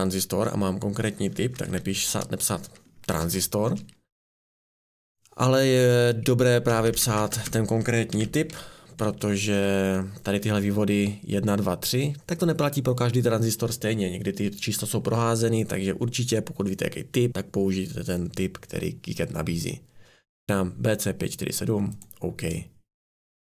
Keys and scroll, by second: 1.3-4.8 typing, 6.7 BackSpace, 6.9 BackSpace, 7.2 BackSpace, 7.3 BackSpace, 8.8-9.5 typing.